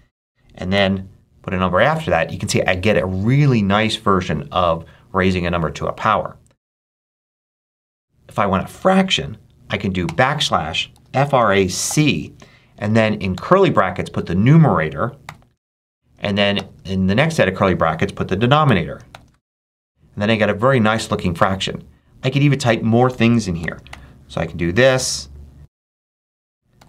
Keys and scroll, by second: 0.6 2, 7.4 BackSpace, 9.9-13.2 typing, 15.1 6, 15.5 shift+], 16.4 shift+[, 18.5 9, 19.0 shift+], 23.5 shift+=, 23.8 shift+9, 24.6 9, 26.1 shift+-, 26.6 2.